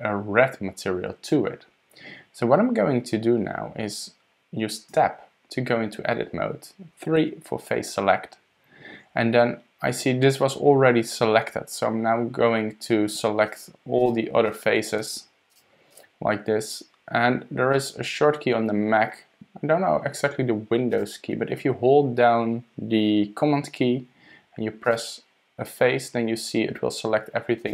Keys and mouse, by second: 4.9 Tab, 7.2 3, 13.4 shift+middle click, 14.4 shift+click, 15.5 shift+click, 15.9 shift+click, 17.7-18.9 middle drag, 24.8 super+click.